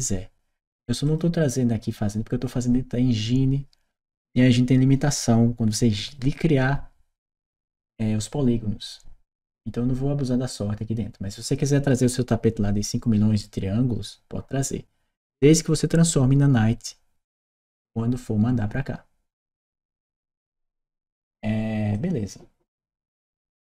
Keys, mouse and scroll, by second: 0.9 click, 20.2 click, 21.8-23.0 drag, 23.4 right click.